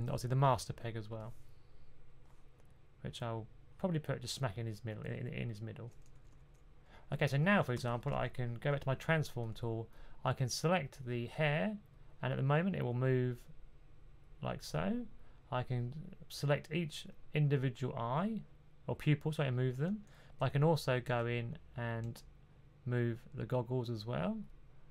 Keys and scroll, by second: 6.2-7.5 typing, 20.3-21.9 typing.